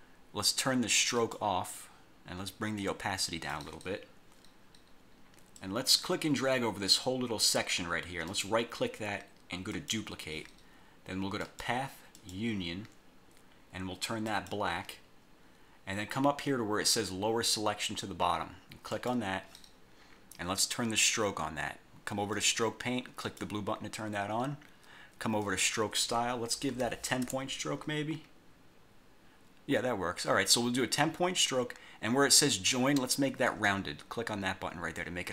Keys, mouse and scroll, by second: 1.2 click, 2.9 click, 5.7-7.7 drag, 8.4 right click, 9.8 click, 11.6 click, 12.2 click, 14.4 click, 19.0 click, 22.4 click, 23.3 click, 25.5 click, 26.8 1, 27.3 Return, 33.6 click.